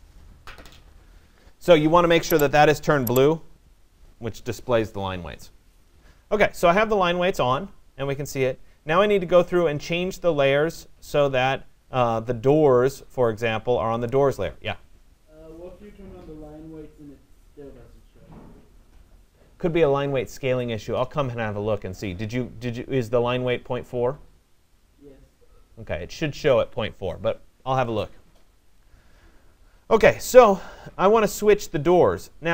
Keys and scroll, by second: 11.9 m.